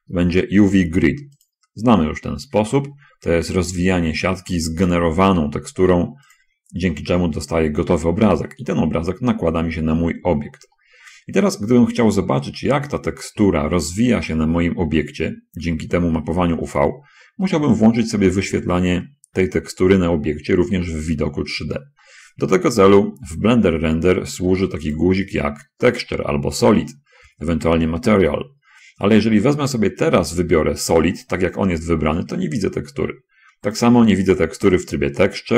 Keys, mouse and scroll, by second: 0.0 click, 1.8 click, 9.2-9.9 scroll down 2, 11.1 middle click, 14.6-16.6 middle drag, 18.6-20.2 middle drag, 20.4 middle click, 21.2 middle click, 22.4 middle click, 25.3 click, 31.7 click, 33.0 middle click, 33.8 click, 35.0 click.